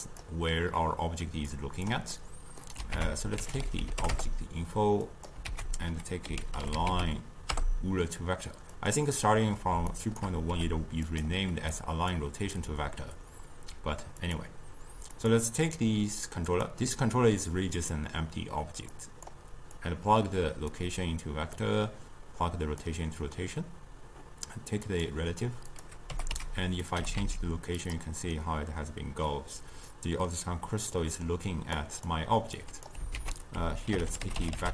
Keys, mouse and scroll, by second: 0.1 click, 1.5 click, 2.1 middle click, 2.9 ctrl+a, 5.5 ctrl+a, 9.9 shift+right click, 10.5 g, 11.8 click, 14.2 click, 15.1 click, 18.9 click, 19.8 click, 21.6-24.6 drag, 24.9 click, 25.7 click, 26.1 g, 27.0 g, 28.4-31.8 middle drag, 31.8 click, 33.2 ctrl+a.